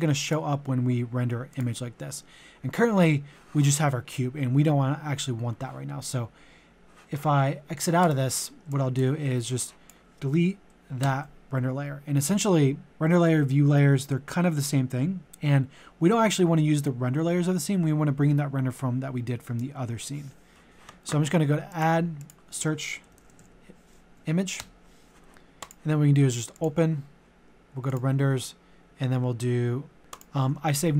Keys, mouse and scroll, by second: 11.0 Delete, 21.7 click, 23.1-24.1 typing, 24.6 Return, 25.6 click.